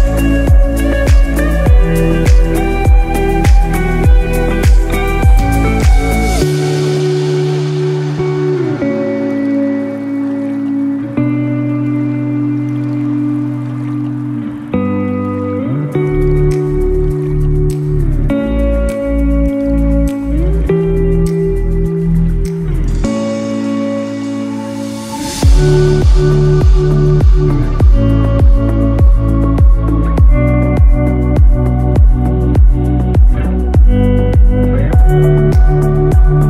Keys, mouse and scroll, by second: 3.0-3.3 scroll up 2, 4.6 click, 6.3 ctrl+i, 7.7-8.5 scroll down 5, 8.6 scroll up 1, 9.5 click, 9.9 ctrl+z, 11.6 scroll down 1, 11.9 scroll up 3, 12.1 scroll down 2, 12.3-12.8 scroll up 3, 12.9 scroll down 2, 13.0 scroll up 2, 13.2 scroll down 1, 13.3 scroll up 1, 13.5 scroll down 1, 13.5 scroll up 1, 13.6 scroll down 1, 14.5 click, 17.1 middle click, 17.8 scroll up 4, 18.6 shift+middle click, 22.2 scroll down 5, 22.5 middle click, 24.0 /, 24.6 /, 25.1 /, 25.9 scroll down 1, 26.2 shift+middle click, 26.6 middle click, 27.1 shift+scroll up 1, 27.1 shift+middle click, 27.5 middle click, 28.2 click, 28.8 Tab, 29.3 click, 30.6 click, 31.7 click, 33.7 Delete, 36.3 middle click.